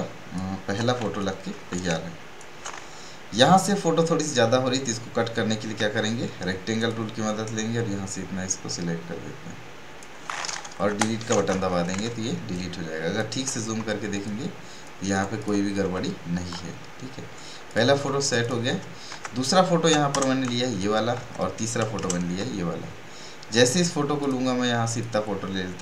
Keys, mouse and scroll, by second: 1.1-4.9 drag, 5.7 m, 6.9-11.4 drag, 11.7 b, 12.1 ctrl+space, 12.5 ctrl+click, 12.6 ctrl+space, 14.1 space, 14.2 space, 14.7 space, 15.3 click, 15.8 v, 16.7 alt+scroll down 1, 17.6 click, 18.0 space, 18.2 right click, 18.4 click, 19.1 ctrl+Tab, 24.2-25.8 drag.